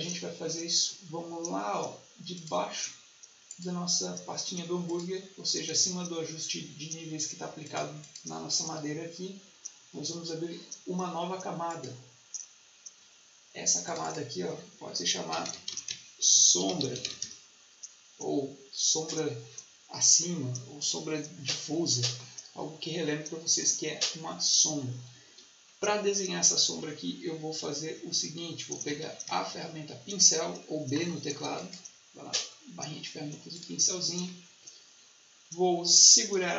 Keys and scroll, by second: 15.0-17.4 typing, 28.8 b.